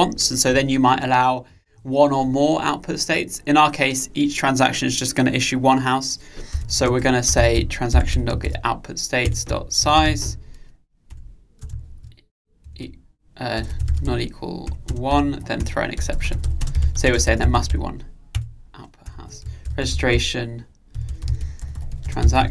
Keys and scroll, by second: 9.3 Return, 18.4 Return.